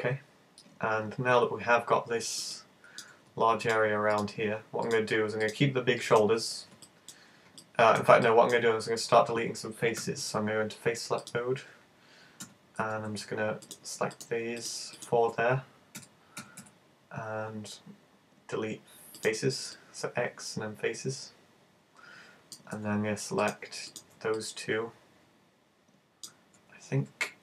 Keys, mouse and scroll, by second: 2.6 middle click, 3.7 shift+right click, 4.2 shift+right click, 4.5 shift+right click, 4.9 shift+right click, 5.5 shift+right click, 6.1 shift+right click, 6.9 middle click, 7.9 middle click, 8.3 middle click, 10.0 super+a, 11.2 click, 12.5 z, 12.8 z, 13.7 right click, 14.2 shift+right click, 14.4 shift+right click, 14.7 shift+right click, 14.9 shift+right click, 16.0 z, 16.4 z, 16.6 x, 19.7 middle click, 23.4 right click, 23.9 shift+right click, 24.3 middle click, 26.5 z, 26.9 z.